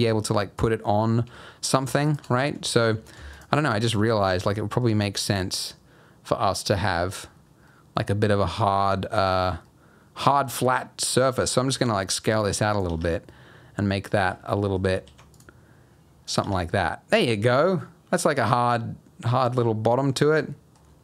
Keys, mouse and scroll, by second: 0.5 shift+click, 2.0 alt+shift+click, 2.6 alt+click, 3.3 alt+shift+click, 3.7 alt+shift+click, 4.4 shift+middle click, 4.8 shift+scroll up 2, 7.1 click, 7.4 scroll down 2, 7.6 middle click, 8.5 scroll up 1, 8.6 middle click, 9.6 middle click, 11.5 s, 12.9 Tab, 13.1 scroll down 2, 13.3 middle click, 14.2 Tab, 14.2-14.5 scroll up 2, 14.5 middle click, 15.0 ctrl+r, 16.4 Tab, 16.7 middle click, 17.2-17.5 scroll down 2, 17.5 middle click, 18.2-19.1 scroll down 4, 18.4 middle click, 19.9 scroll up 3, 20.1 Tab.